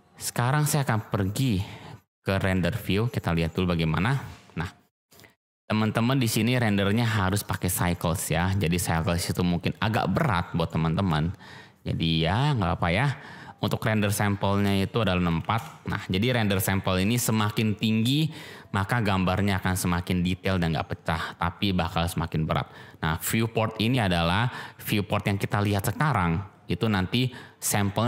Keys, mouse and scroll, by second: 1.4 click, 2.4 z, 7.3-8.6 drag, 13.5-22.5 drag.